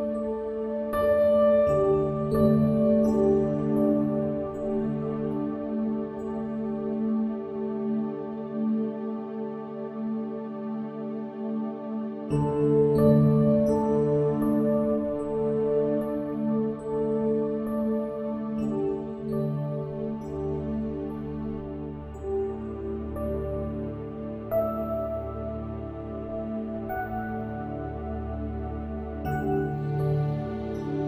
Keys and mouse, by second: 2.6 click.